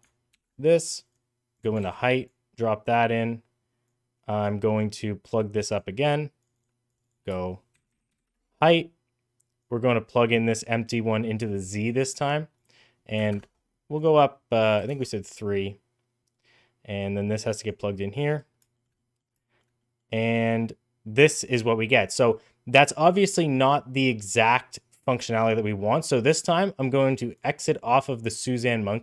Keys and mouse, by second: 0.2 ctrl+c, 1.4 click, 1.7 ctrl+v, 2.1 click, 2.9 click, 3.8 click, 4.7-5.6 drag, 6.3 click, 6.7 click, 7.0-8.7 shift+drag, 9.5-11.8 drag, 12.6 click, 13.9 click, 16.9 click, 18.6 shift+middle click, 18.8 middle drag, 19.3 shift+middle drag, 19.6 middle drag, 28.2 click.